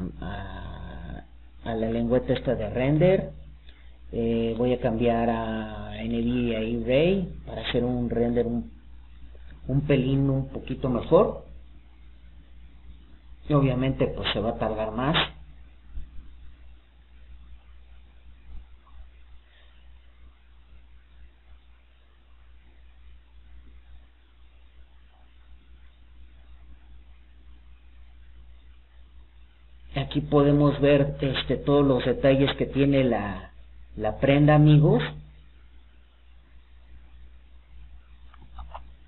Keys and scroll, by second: 22.7 alt+d.